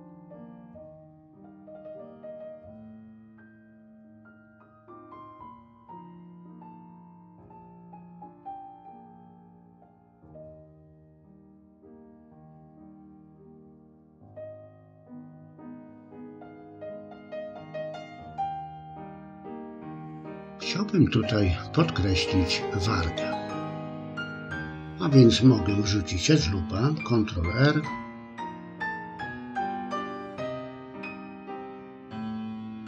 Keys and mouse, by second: 0.0 click, 0.5 click, 0.8 click, 1.0 middle click, 1.4 middle click, 2.1 click, 2.5 click, 2.9 middle click, 3.2 click, 3.5 click, 3.9 click, 4.5 click, 4.8 click, 5.1 middle click, 5.8 click, 6.2 middle click, 6.8 click, 7.5 click, 7.9 middle click, 9.3 click, 9.6 click, 10.4 click, 10.9 ctrl+click, 11.6 middle click, 12.3 click, 12.8 click, 13.2 click, 13.5 middle click, 13.9 middle click, 14.5 click, 14.9 click, 16.4 f, 16.7 middle click, 27.6 ctrl+r, 32.0 click.